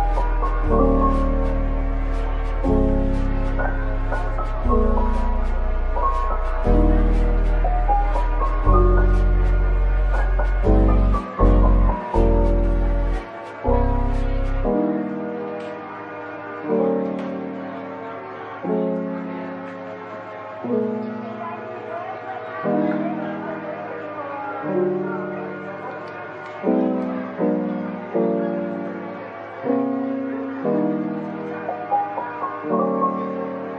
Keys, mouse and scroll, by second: 0.0-0.1 typing, 0.7 middle click, 3.8-5.7 typing, 4.2 scroll down 1, 4.5 middle click, 8.5 typing, 9.8 typing, 14.2-14.8 typing, 16.4-17.0 typing, 19.1-20.1 typing, 21.5-23.7 typing, 25.7-26.7 typing, 27.3 middle click, 28.6-29.6 typing, 30.5 middle click, 32.2-33.1 typing.